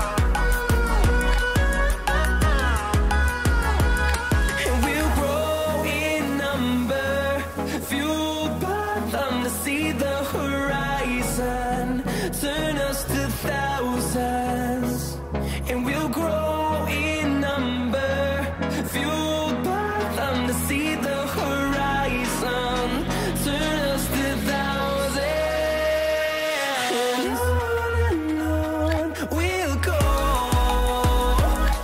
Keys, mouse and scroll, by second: 4.7 click, 14.0-16.4 scroll down 1, 16.4-18.5 drag, 18.5 right click, 19.5 click, 20.7-22.1 scroll down 1, 22.1 click, 22.7 scroll down 1, 23.5-28.5 drag, 23.9 typing, 31.7-31.8 drag.